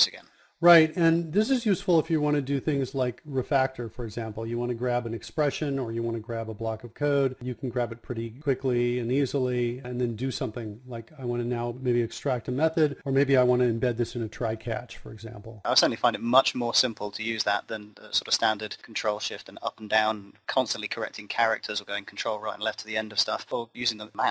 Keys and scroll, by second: 0.4 KP_Subtract.